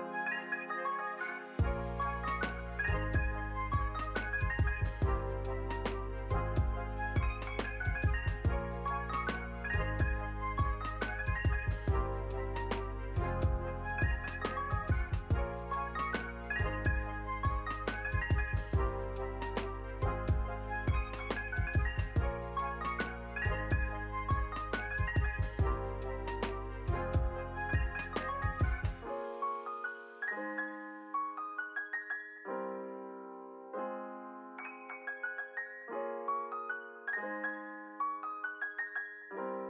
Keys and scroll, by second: 0.0 u, 26.0 u, 35.2 ctrl+z.